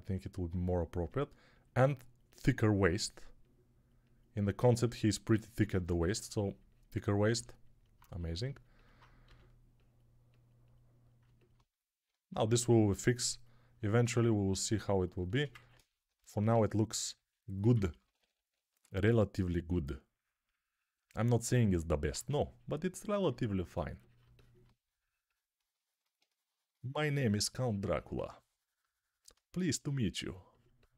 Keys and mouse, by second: 5.7 1, 9.1 g, 12.7-17.6 alt+drag, 12.7-17.6 alt+middle drag, 12.7-17.6 alt+right drag, 17.6-18.2 typing, 22.0 2.